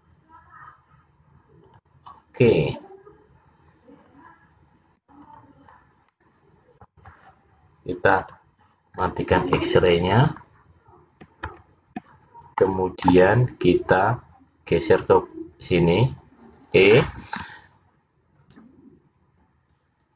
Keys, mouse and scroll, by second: 5.3 click, 6.2 middle click, 8.2 click, 9.0 scroll up 2, 11.6 ctrl+z, 12.7 middle click, 15.0 click.